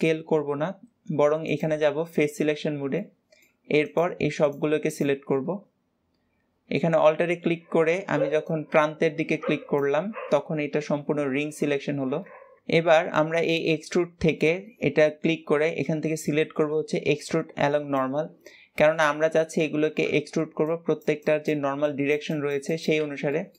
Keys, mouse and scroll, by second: 1.4 click, 2.4-2.8 scroll up 1, 2.8 middle click, 3.7 click, 4.3 alt+shift+click, 4.7 alt+shift+click, 5.3-10.6 middle drag, 12.0-13.4 middle drag, 13.4-16.1 drag, 18.6 scroll down 1, 18.8-22.8 middle drag, 23.2-23.5 middle drag.